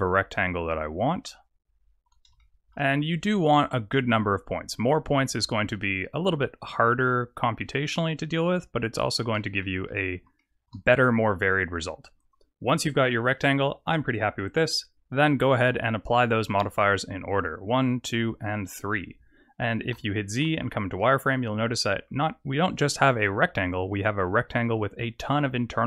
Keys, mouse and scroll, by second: 0.0 click, 1.1 shift+click, 2.3 shift+middle click, 3.8 click, 4.4 click, 6.8 shift+click, 9.6 middle click, 10.3 shift+middle click, 12.8-13.2 scroll down 3, 13.2 middle click, 15.3 click, 15.9 click, 16.5 click, 16.8 click, 17.5 click, 18.0 click, 18.4 click, 19.9 z, 21.0 middle click.